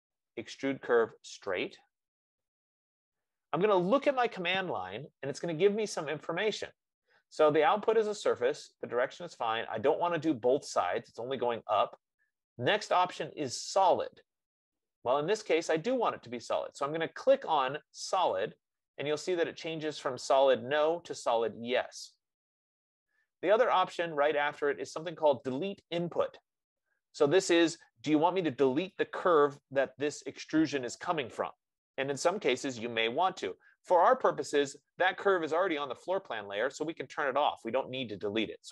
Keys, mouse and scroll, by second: 2.4 click, 18.9-23.7 drag.